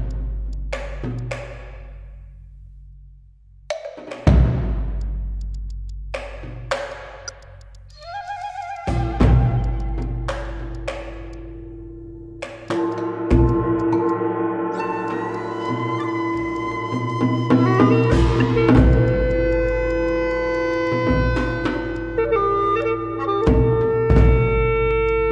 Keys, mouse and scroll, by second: 0.0 Tab, 1.2 ctrl+click, 2.1 Tab, 2.5 Tab, 2.6 middle click, 2.6 Tab, 3.0 Tab, 3.0 middle click, 3.1 Tab, 3.4 middle click, 3.5 Tab, 3.7 Tab, 4.6-4.9 scroll down 1, 4.9 alt+middle click, 5.0 alt+click, 5.4 alt+click, 6.0 alt+middle click, 6.1 scroll up 1, 6.3 alt+middle click, 7.4 shift+click, 7.7 shift+click, 8.0 shift+click, 8.4 shift+click, 8.7 shift+click, 9.8 shift+click, 12.7 shift+click, 16.4 shift+click, 16.5 shift+click, 16.6-17.0 scroll down 1, 18.6 Tab, 18.9 shift+click, 19.7 shift+click, 20.0 shift+click, 20.8 shift+click, 21.9 ctrl+click, 22.8 shift+click, 23.2 alt+middle click, 24.1 alt+click.